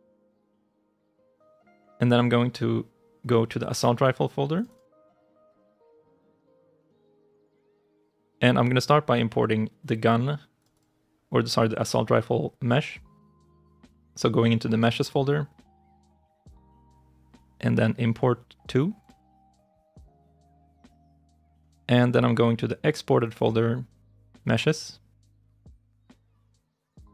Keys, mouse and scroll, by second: 4.5 double click, 10.6 double click, 16.4 right click, 23.2 double click, 25.6 double click.